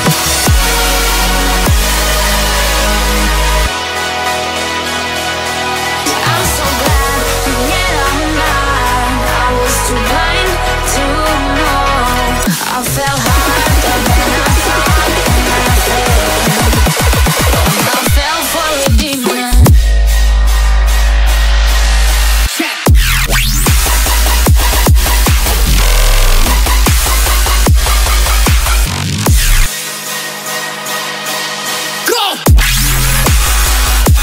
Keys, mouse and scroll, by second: 1.2-2.1 typing, 3.7 Return, 4.9 scroll, 5.1 middle click, 10.0 scroll down 3, 10.4 middle click, 13.3 scroll up 4, 14.2 middle click, 16.6 scroll up 2, 17.1 shift+middle click, 18.9 middle click, 29.6 0, 30.6 0, 31.1 3, 32.1 Return, 33.9 middle click.